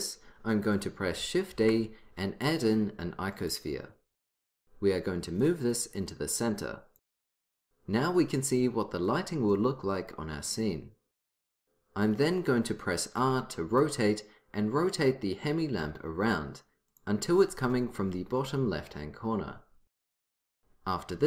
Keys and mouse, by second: 1.6 shift+a, 5.5-7.5 drag, 13.3 r.